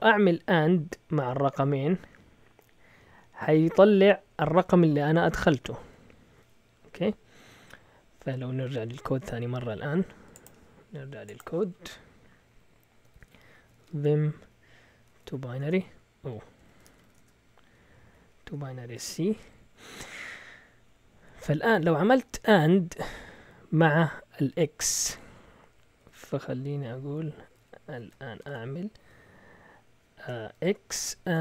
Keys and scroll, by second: 9.3 typing, 13.1 ctrl+l, 13.3-15.5 typing, 15.6 Return, 16.6 Escape, 16.6-19.0 typing, 18.1 Up, 19.0 Return, 20.1 Down, 20.1-22.5 typing, 26.1-28.4 typing, 30.5-31.4 typing.